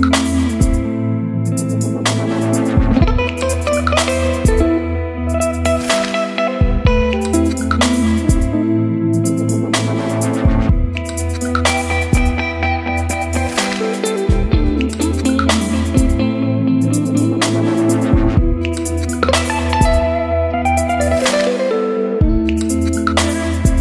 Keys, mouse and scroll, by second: 0.0 click, 1.3-2.7 scroll up 2, 2.7-6.2 drag, 6.7-7.4 scroll up 2, 7.4-23.8 drag.